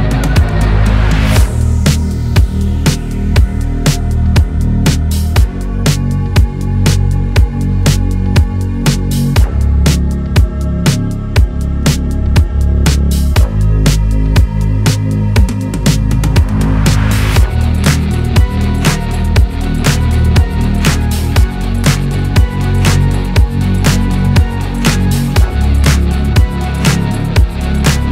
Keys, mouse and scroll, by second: 0.1 scroll down 7, 0.3 shift+middle click, 0.8-1.8 drag, 1.9 alt+z, 2.4 click, 2.7 scroll up 2, 2.9 alt+z, 3.2 shift+middle click, 3.4 scroll up 4, 3.6 shift+middle click, 4.1 click, 5.3 scroll down 2, 5.4 KP_7, 6.1 alt+z, 6.2 scroll down 2, 6.5 click, 7.0 alt+z, 7.1 middle click, 7.4 scroll up 4, 7.7-8.7 drag, 8.7 n, 9.0 click, 9.8 shift+middle click, 10.2 click, 10.3-11.8 drag, 12.0-13.4 drag, 13.7 n, 14.0 KP_1, 14.2 click, 14.7 shift+a, 16.9 x, 18.1 r, 19.2-19.5 scroll down 2, 19.5 Tab, 20.2 BackSpace, 20.8 KP_3, 21.3 KP_Enter, 22.3 click, 22.7 Tab, 22.8 scroll down 1, 23.0 middle click, 23.1 scroll up 1, 23.6 click, 24.4 KP_1, 24.5 scroll up 1, 24.9 g, 26.9-27.5 scroll down 2, 27.5 KP_7, 27.8-28.1 scroll up 4.